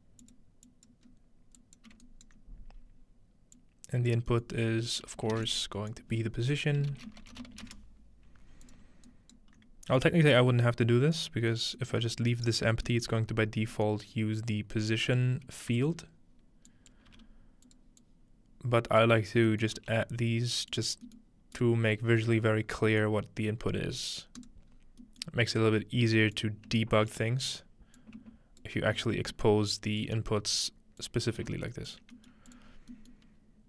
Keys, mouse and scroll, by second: 0.2 click, 0.6-7.9 drag, 1.1-3.6 scroll up 2, 2.1-4.1 alt+right drag, 5.4 typing, 6.8-8.2 typing, 8.7-10.4 drag, 9.1-10.4 alt+right drag, 11.3 click, 13.3-13.7 scroll up 2, 14.4-15.2 drag, 15.4-16.2 scroll down 1, 16.2 scroll up 1, 16.7-17.7 drag, 17.1 g, 17.8 click, 19.0-23.1 drag, 19.3-20.7 scroll down 1, 19.7 middle click, 19.8 g, 22.2-23.1 scroll up 1, 23.7 scroll up 4, 24.4 click, 24.7 scroll down 2, 25.5 scroll up 4, 26.4-27.6 drag, 28.0-33.6 ctrl+drag, 32.3 middle drag, 32.7-33.6 scroll down 1.